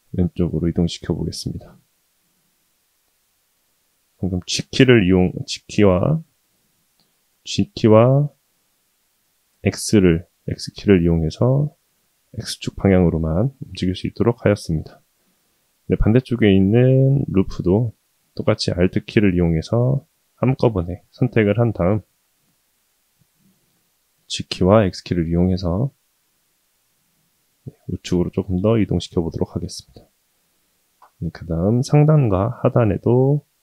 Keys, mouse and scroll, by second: 1.6-3.3 middle drag, 6.4 KP_7, 7.3 g, 13.5-14.1 shift+middle drag, 15.7-16.7 middle drag, 17.0 scroll up 1, 17.7-18.2 scroll up 1, 18.7 alt+click, 19.9-21.1 middle drag, 21.4 scroll down 2, 22.2 KP_7, 23.5 g, 29.4-30.5 middle drag, 32.1 ctrl+r.